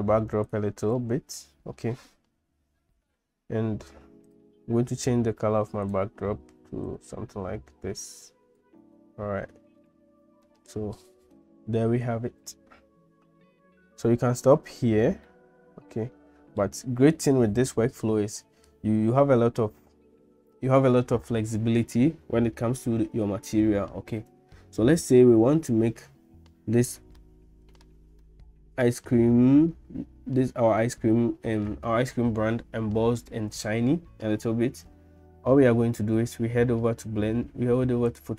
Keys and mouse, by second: 0.9-1.9 middle drag, 5.8 click, 15.3-16.7 middle drag, 27.3 shift+middle click, 28.3 middle click.